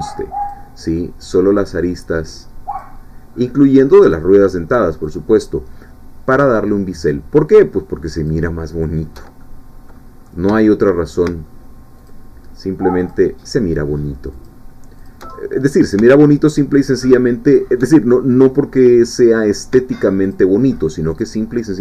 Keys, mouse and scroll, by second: 0.5-1.7 alt+shift+drag, 2.8-4.3 alt+shift+drag, 5.1-6.6 alt+shift+drag, 8.1 alt+shift+click, 9.4 alt+shift+middle click, 10.2 scroll up 1, 10.6 shift+middle click, 12.0 alt+shift+click, 13.1-14.6 alt+shift+drag, 15.1 alt+shift+click, 15.3 alt+shift+middle click, 16.9 alt+shift+click, 17.5 alt+shift+click, 17.9 alt+shift+middle click, 18.8 shift+middle click, 20.2 alt+shift+click, 21.2 alt+shift+click.